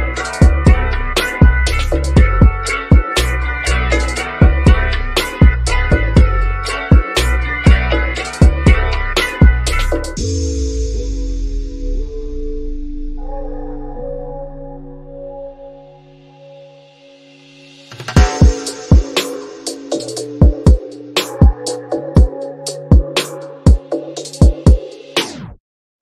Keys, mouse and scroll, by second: 5.1-7.9 drag, 9.9 typing, 11.5 Return, 12.4 click, 13.0 scroll up 1, 16.1-17.4 drag, 17.4-18.0 scroll down 1, 18.7-23.2 drag, 25.8-26.0 scroll up 1.